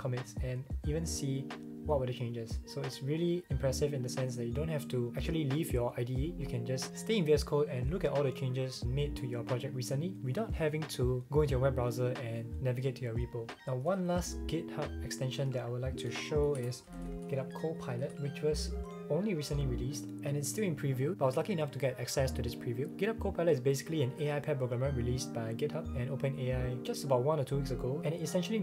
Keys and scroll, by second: 14.1 shift+super+x, 16.1 super+a, 16.3-17.8 typing.